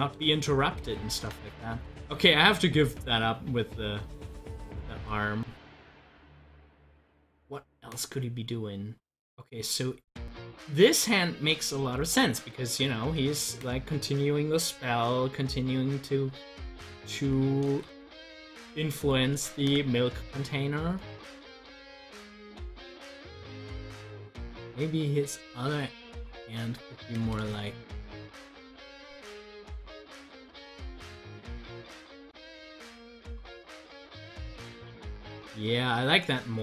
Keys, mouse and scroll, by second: 0.2 ctrl+z, 10.6-16.5 drag, 17.4 click, 17.8 ctrl+z, 19.5 ctrl+z, 24.2-27.5 drag, 27.5 ctrl+z, 32.7 ctrl+z.